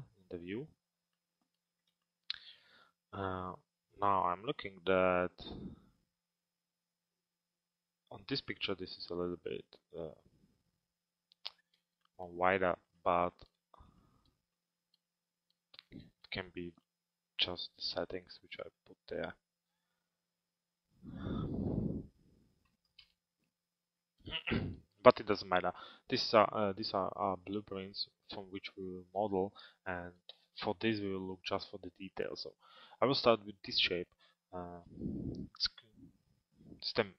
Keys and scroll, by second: 22.6 Return, 34.9 t.